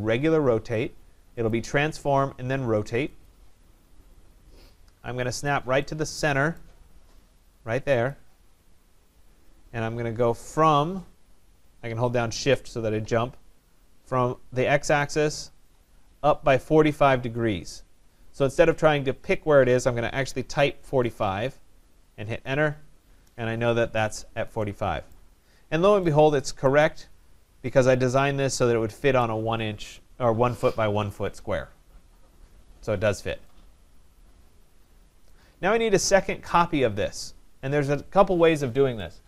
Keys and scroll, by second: 22.3 Return.